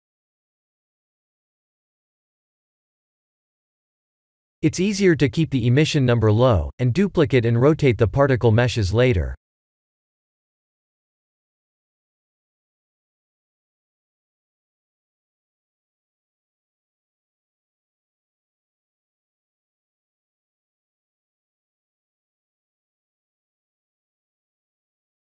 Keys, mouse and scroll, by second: 5.5-7.7 middle drag, 8.4 KP_1, 9.1 KP_3, 13.4-16.1 drag, 14.3-15.7 typing.